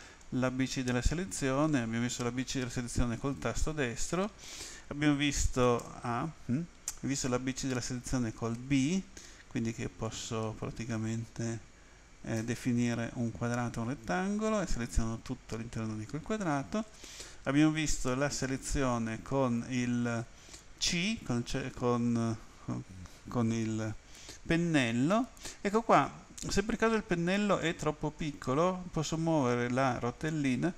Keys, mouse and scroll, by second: 3.2 right click, 5.8 a, 8.6 b, 10.1 click, 18.6 a, 20.9 c, 29.0-29.5 scroll up 1, 29.5-30.4 scroll down 7.